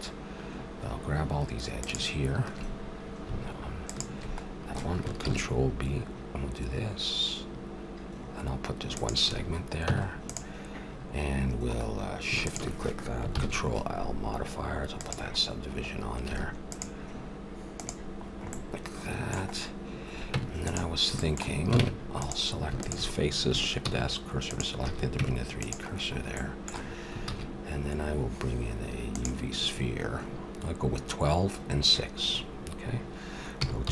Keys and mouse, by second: 1.8-3.7 drag, 5.2 ctrl+b, 5.2 click, 9.3 a, 9.8 Tab, 11.4-12.4 middle drag, 12.4-14.3 drag, 13.4 ctrl+l, 15.4 middle click, 16.3 a, 16.7-19.6 drag, 19.6 middle click, 20.3 Tab, 21.7 ctrl+Tab, 23.8 shift+s, 24.8 a, 25.2 Tab, 27.3 shift+a, 33.6 r.